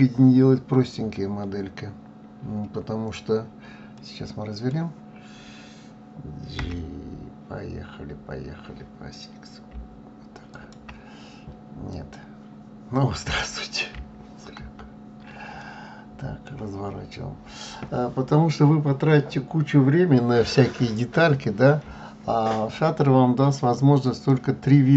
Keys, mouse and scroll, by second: 3.9-6.6 middle drag, 6.6 g, 10.5 x, 10.7 x, 14.6 ctrl+z, 15.6-18.6 middle drag, 24.0 click.